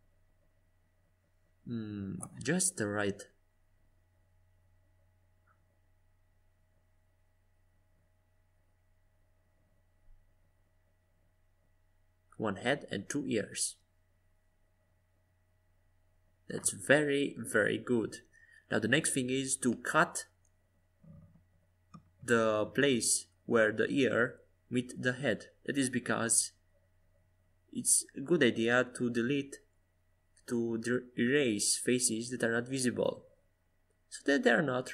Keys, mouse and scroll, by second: 2.6-4.4 middle drag, 4.4-7.5 drag, 16.4-19.3 drag, 20.7-23.2 drag, 28.3-30.4 drag, 29.7 right click, 30.7-32.0 right drag, 32.5-33.6 drag, 34.4 click, 34.8-34.9 middle drag.